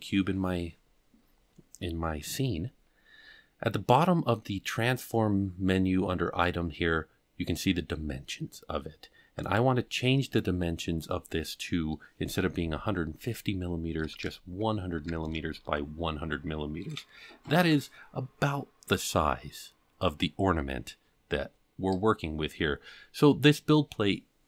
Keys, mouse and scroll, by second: 9.4-22.5 drag, 14.2 KP_0, 15.2 KP_0, 23.3-23.7 middle drag.